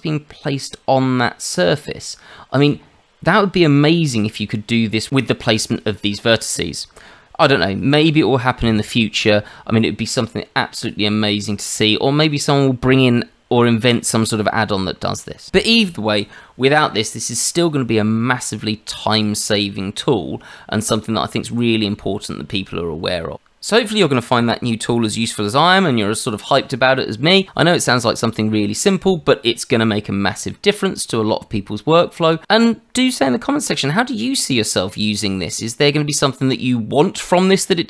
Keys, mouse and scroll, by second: 11.9 shift+middle click.